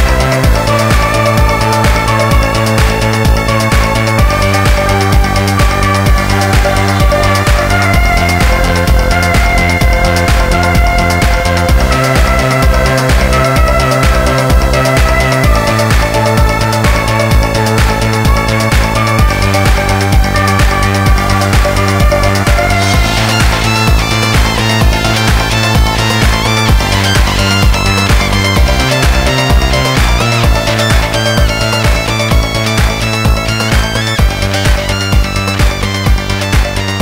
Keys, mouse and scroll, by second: 18.0 middle click, 18.5 middle click, 18.6 scroll up 1, 18.9 middle click, 19.2 middle click, 20.8 click, 21.2 click, 21.4 click, 21.6 click, 21.9 a, 22.7 click, 23.0 click, 23.3 click, 23.3 a, 23.8 click, 24.1 click, 24.5 click, 24.7 click, 25.4 a, 26.4 click, 26.7 click, 27.3 click, 27.8-28.2 typing, 28.2 Return, 29.1 click, 29.4 click, 29.7 a, 30.6 click, 30.9 click, 32.0 click, 32.5 click, 35.1 click.